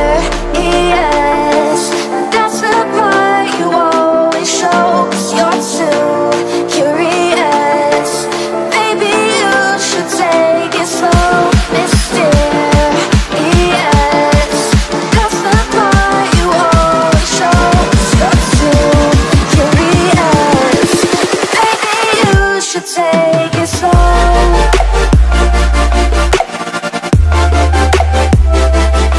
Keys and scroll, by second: 2.1 ctrl+alt+shift+e, 3.1 ctrl+space, 4.4 b, 5.1 n, 9.1 space, 9.8 9, 10.8 x, 11.8 8, 12.0 ctrl+space, 12.2 ctrl+space, 12.4 ctrl+z, 12.9 space, 13.3 ctrl+z, 13.6 x, 14.3 space, 16.7 space, 17.0 z, 19.5 space, 19.8 x, 23.4 space, 25.3 z, 26.2 x, 27.5 space.